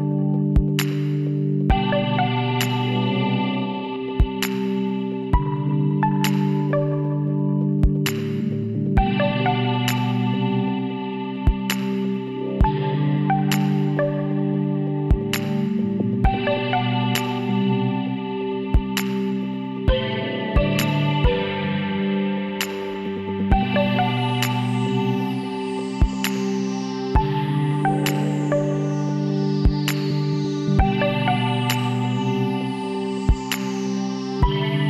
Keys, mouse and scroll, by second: 0.6 middle click, 1.6-2.8 middle drag, 3.2-5.0 middle drag, 6.9-10.3 drag, 7.6-9.2 right drag, 13.5-15.2 right drag, 14.1 l, 15.5 KP_1, 17.2 s, 19.6 click, 20.0 middle click, 20.5 middle click, 21.0 KP_3, 21.5-23.4 middle drag, 22.9 s, 27.6-30.3 middle drag, 30.3-32.1 drag, 32.1-33.2 middle drag, 34.7-34.8 drag.